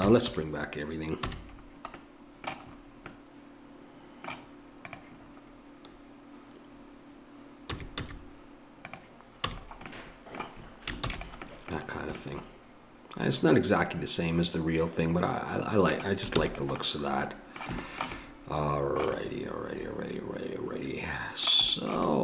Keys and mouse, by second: 0.2 alt+h, 1.2 a, 1.6-3.8 middle drag, 4.8 right click, 5.2-7.7 drag, 7.7 s, 9.5 a, 11.0 ctrl+s, 16.4 ctrl+s.